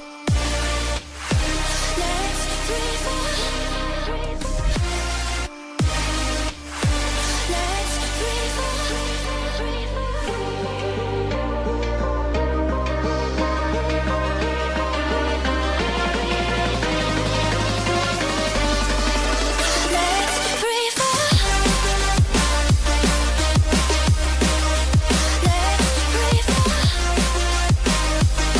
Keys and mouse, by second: 0.7 g, 1.7 r, 2.4 ctrl+z, 2.9 r, 6.2 g, 7.3 g, 8.4 r, 11.5 r, 12.9 r, 13.7 click, 14.1 KP_3, 14.8 r, 22.2 i, 22.6 click, 24.6 a, 25.0 i, 26.4 Left, 26.5 Left, 27.2 Right, 27.3 Right.